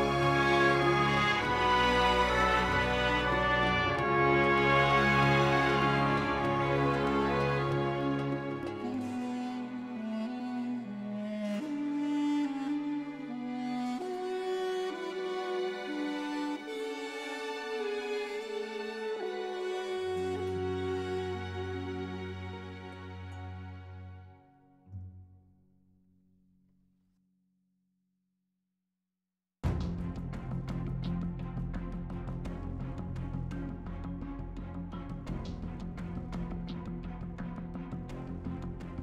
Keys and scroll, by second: 5.4 Return, 7.7 3, 17.1 s, 17.5 y, 21.2 s, 26.3 s, 26.6 z, 32.0 e.